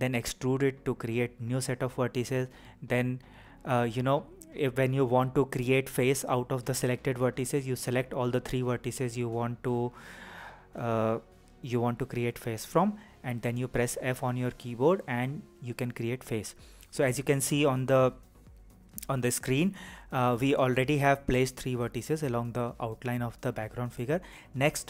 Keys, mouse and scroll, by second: 4.5 click, 7.0 click, 22.6 e.